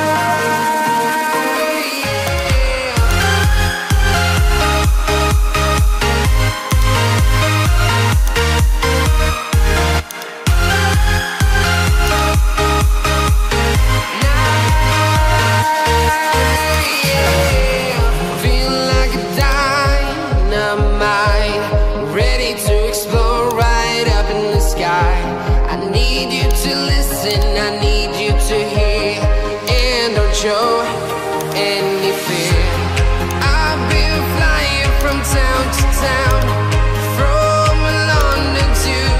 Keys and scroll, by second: 0.9 ctrl+t, 4.3 Return.